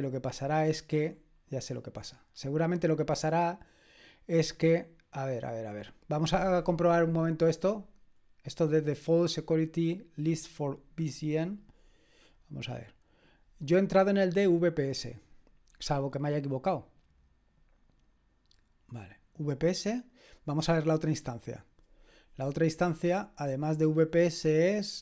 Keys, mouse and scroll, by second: 0.5-1.1 scroll down 2, 1.1-3.1 scroll down 1, 3.1-5.1 drag, 4.7-5.7 scroll up 2, 5.7 click, 7.4-12.2 scroll down 2, 12.2 click, 20.4 click.